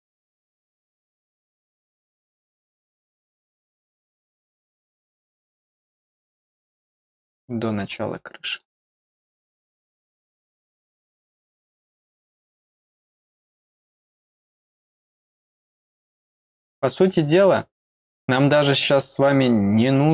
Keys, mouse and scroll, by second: 1.1 click, 3.3 click, 5.5-5.9 scroll up 1, 6.6 scroll down 1, 7.9 click, 11.5 click, 14.5 click.